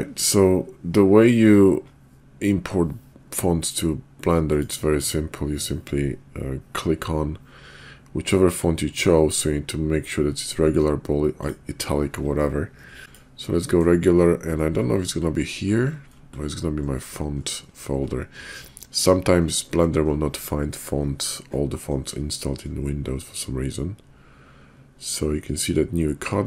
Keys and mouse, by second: 4.4 click, 13.0 click.